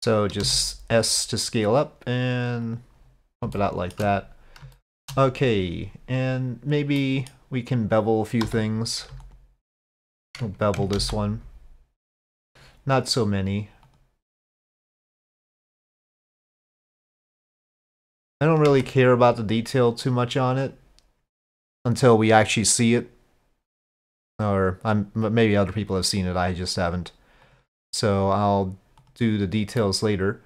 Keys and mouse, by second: 0.4 s, 3.6 shift+click, 4.8 shift+click, 7.0 click, 8.5 2, 11.0 ctrl+b, 13.9 click, 18.7 Tab, 19.9 click, 24.2 click, 27.5 click, 29.0 click, 29.8-30.4 middle drag.